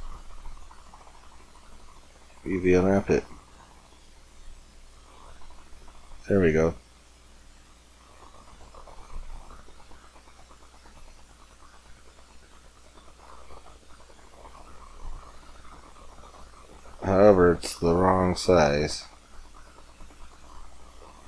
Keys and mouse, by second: 1.8-4.8 drag, 7.8 Tab, 7.8 click, 13.6 middle click, 16.9 middle click.